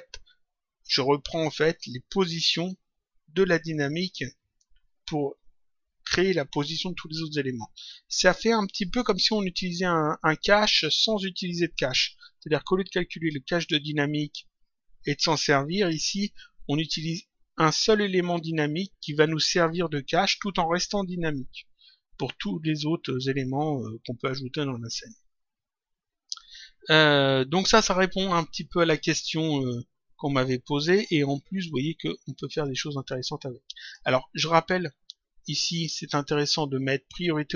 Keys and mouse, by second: 33.1 click, 35.4 click.